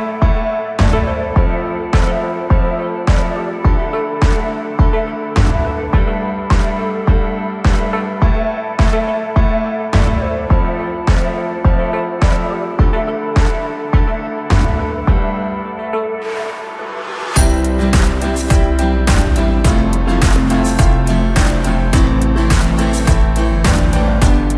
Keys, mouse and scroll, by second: 0.0 click, 0.2-3.2 middle drag, 3.9 KP_Divide, 4.6 KP_1, 5.8-7.6 scroll down 1, 7.6 e, 10.6 s, 12.5 scroll down 1, 12.8-13.9 middle drag, 13.9 click, 14.5 middle click, 15.4 shift+click, 15.8-16.4 scroll up 1, 16.4 KP_1, 18.2 s, 23.2-24.3 scroll up 1, 24.3 scroll up 1, 24.3-24.5 drag.